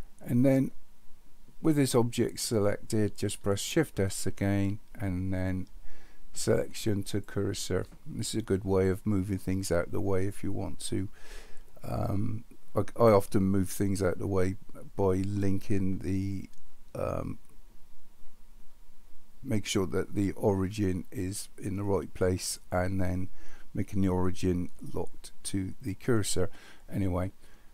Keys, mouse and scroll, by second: 4.2 shift+s.